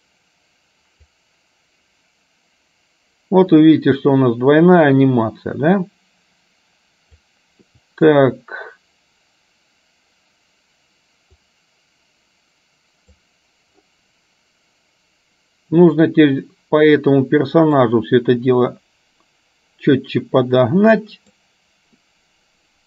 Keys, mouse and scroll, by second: 1.4-9.1 drag, 11.9-13.4 drag, 18.0-21.5 drag.